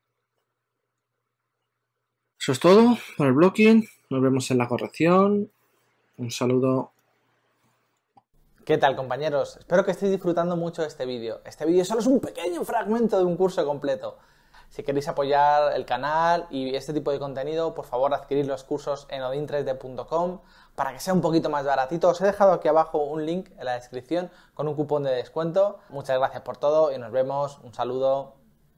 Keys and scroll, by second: 0.0-1.4 typing, 4.2 v.